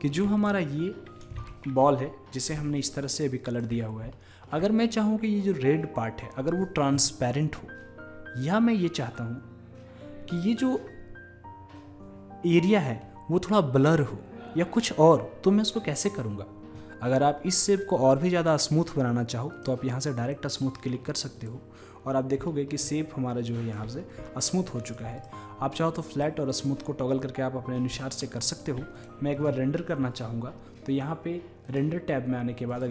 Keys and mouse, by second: 1.6-2.1 drag, 2.7-4.5 drag, 19.6-20.7 drag, 20.7-26.3 middle drag, 26.3-28.5 drag, 28.5-30.7 middle drag, 30.7 click, 31.7-32.9 drag.